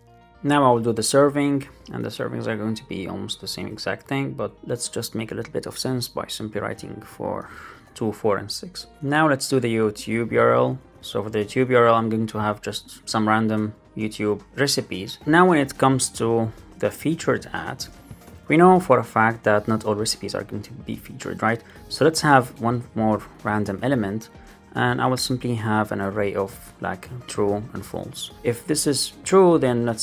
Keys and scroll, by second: 0.2 super+s, 0.2 super+Left, 0.4 super+d, 0.5 Right, 2.0 alt+Right, 2.6 alt+Right, 3.4 shift+super+Right, 3.6 shift+Left, 7.4 super+s, 7.6 alt+super+l, 7.7 super+s, 8.9 super+d, 13.0 alt+Up, 13.9 Return, 15.2 Up, 15.3 super+Right, 15.5 Return, 18.8 Right, 23.0 Right, 24.7 Return, 28.1 super+Right.